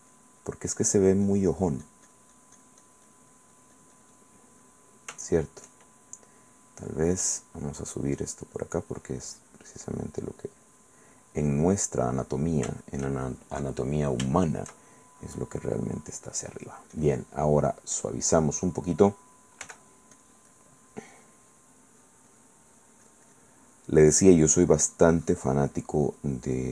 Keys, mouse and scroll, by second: 0.1 click, 1.5 click, 4.9 middle click, 5.5 shift+middle click, 6.6 click, 7.3 click, 8.3 click, 9.1 click, 9.6 click, 9.9 click, 10.4 click, 10.8 click, 11.8 middle click, 11.9 click, 12.2-13.4 middle drag, 12.5 click, 12.5 right click, 15.0-16.7 shift+middle drag, 15.4-16.7 drag, 15.4-16.7 right drag, 17.1 click, 18.1 click, 18.7 click, 19.8 f, 20.3 click, 20.7-22.8 drag, 23.8 middle click, 24.5-26.7 drag.